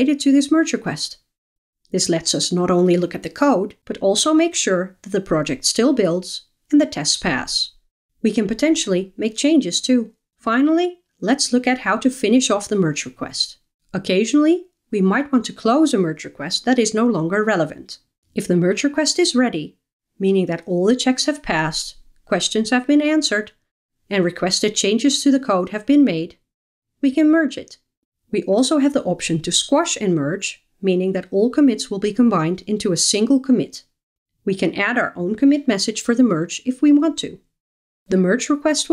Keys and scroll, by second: 1.6 alt+F12, 9.8 alt+F12.